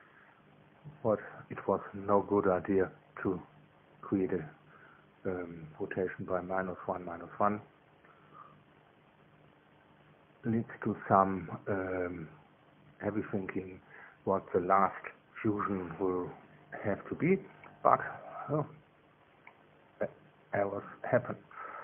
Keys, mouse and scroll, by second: 0.8 Return, 6.3-11.6 drag, 11.6 middle click, 12.2 2, 15.4-17.4 middle drag.